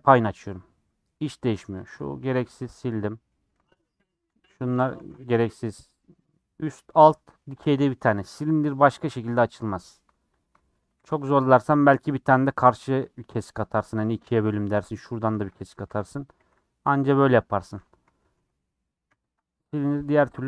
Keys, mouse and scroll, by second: 0.8 middle click, 1.8 alt+Left, 1.9 middle click, 2.6 ctrl+x, 2.8 scroll up 1, 2.8 middle click, 3.7 alt+click, 4.1 alt+click, 4.9 ctrl+x, 5.2-8.1 middle drag, 8.1 2, 9.4 middle click, 10.8 a, 11.0 u, 15.7 a, 15.9 u, 18.0 ctrl+z, 18.3 ctrl+z, 19.0 ctrl+z.